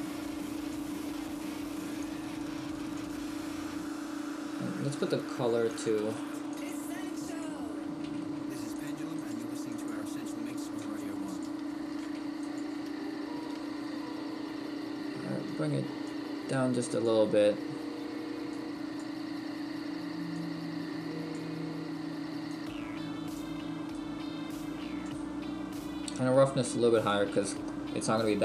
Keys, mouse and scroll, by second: 2.2 click, 6.2 click, 9.7 click, 18.8 click, 20.5 click, 22.8 click, 26.3 click.